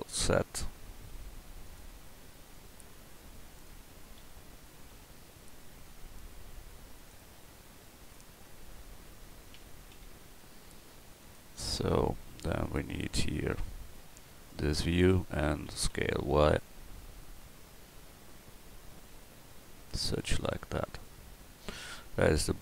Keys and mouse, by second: 2.5-4.2 drag, 4.2 d, 4.9 z, 9.6 s, 14.5-15.7 middle drag, 15.7 s, 20.5-20.9 middle drag.